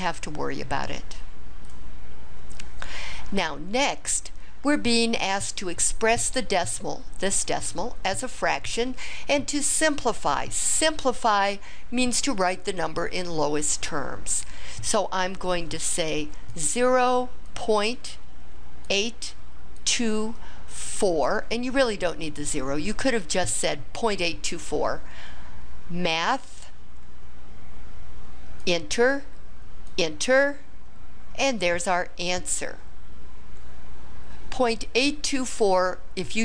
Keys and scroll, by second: 16.5 0, 18.4 ., 18.9 8, 19.8 2, 20.9 4, 28.6 Return, 29.9 Return.